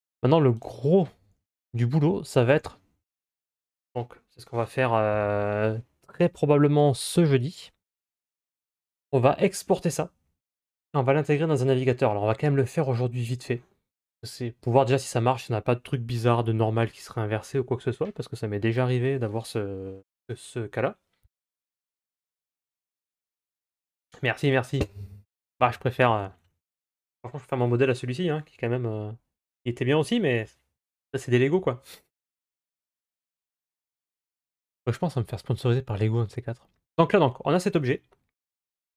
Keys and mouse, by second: 2.4 ctrl+s, 34.0-38.9 drag.